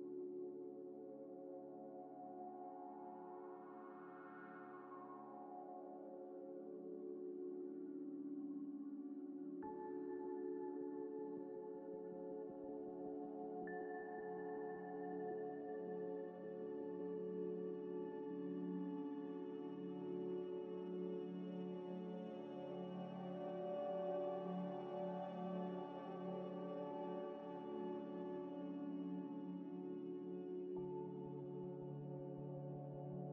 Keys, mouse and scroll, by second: 0.0-1.8 typing, 0.8 KP_Enter, 1.3 Return, 1.6 Tab, 1.6 Tab, 2.3 Tab, 2.7 middle click, 2.8 middle click, 3.2 Tab, 3.5 e, 4.0 Tab, 4.5 Tab, 4.5 Tab, 5.2 Tab, 5.4 g, 5.5 y, 6.4 scroll up 1, 7.9 g, 9.1-12.1 typing, 9.6 scroll up 1, 13.3 s, 14.6-15.5 typing, 15.3 shift+click, 16.9-18.2 typing, 19.2 shift+d, 19.6 g, 19.6 z, 21.4-23.7 typing, 21.5 shift+click, 21.8 shift+click, 25.1 s, 25.7 shift+d, 25.9 g, 26.1 y, 27.5 scroll down 1, 29.0 shift+d, 29.2 g, 29.3 z, 30.0 scroll up 1, 31.3-33.3 typing.